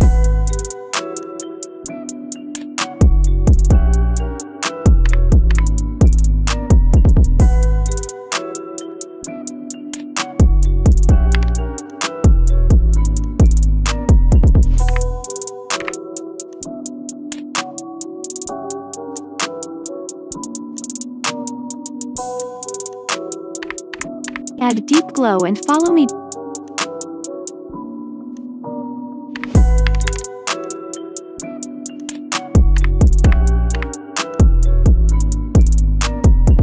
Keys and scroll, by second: 5.1 7, 5.4 5, 11.4 0, 15.7 4, 23.7 d, 24.2 e, 29.4-30.0 typing, 32.8-33.7 typing.